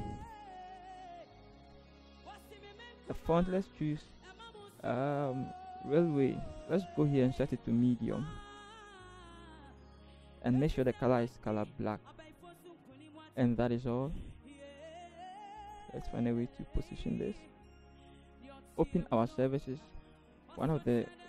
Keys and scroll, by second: 0.1 Return, 15.0 ctrl+t, 17.7 Up, 17.8 Up, 17.8 Return, 17.9 Up, 17.9 v.